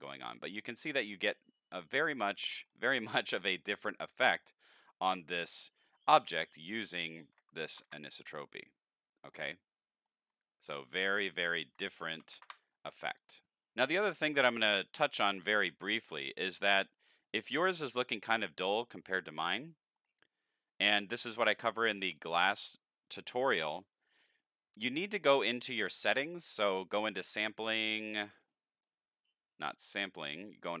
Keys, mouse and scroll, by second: 0.1 middle click, 0.3 scroll up 3, 0.5-1.3 middle drag, 1.6-2.1 shift+middle drag, 2.4 middle click, 3.0 scroll down 2, 3.3 middle click, 6.9 click, 9.3 middle click, 10.2 middle click, 10.4 scroll down 3, 11.3 click, 17.2 click, 19.2 middle click, 21.1 click, 21.5-22.0 scroll up 3, 22.1 click, 25.6 click, 26.4 click, 28.3 click, 29.7 click, 30.4 click.